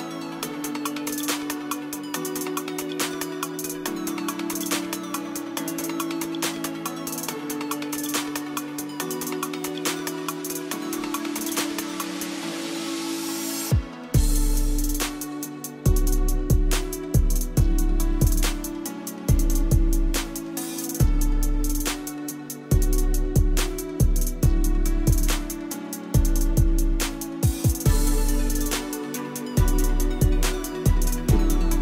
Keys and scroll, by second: 13.2 Caps_Lock, 21.7 f, 23.3 e.